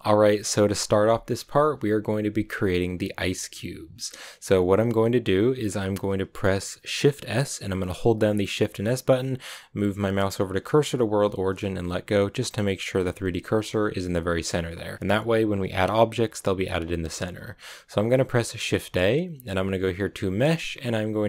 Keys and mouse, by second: 8.5 shift+s, 18.6 shift+a.